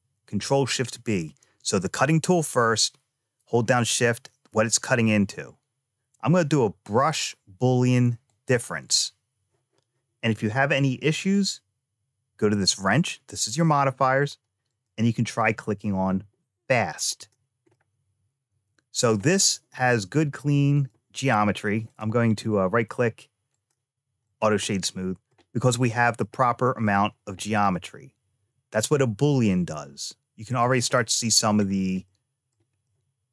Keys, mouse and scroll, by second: 11.0 click, 14.5 click, 17.0 click, 17.5-18.9 middle drag, 20.6 click, 21.7 click, 22.1-23.5 right drag, 24.1 click, 24.5 middle click, 26.0 middle click, 27.0 scroll up 2, 27.5-30.5 middle drag, 30.8 shift+middle click, 31.5-32.0 scroll down 2, 31.9 middle click, 32.7 shift+middle click.